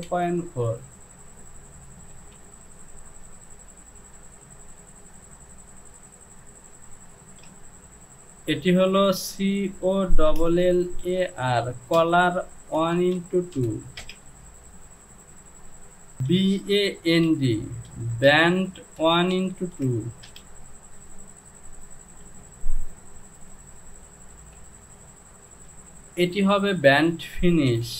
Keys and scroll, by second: 0.1 Down, 2.2 Home, 4.2 e, 7.6 BackSpace, 9.2 c, 10.3-14.1 typing, 16.2 b, 17.3-20.3 typing, 22.3 j, 24.4 Home, 25.7 e.